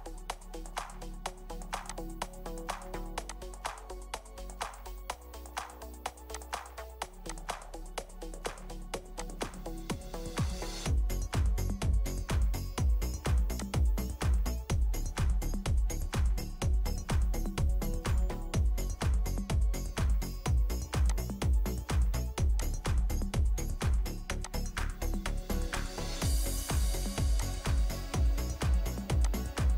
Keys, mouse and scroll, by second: 0.0-0.5 scroll down 1, 0.5 middle click, 4.0 middle click, 4.7-6.3 scroll down 1, 7.7-9.4 scroll down 1, 9.7 scroll down 1, 10.0 middle click, 15.4 middle click, 17.8-18.2 scroll up 1, 18.2 scroll down 1, 18.8 scroll up 1, 18.9-19.5 scroll down 1, 19.5-21.0 scroll down 1, 27.9-29.7 scroll up 1.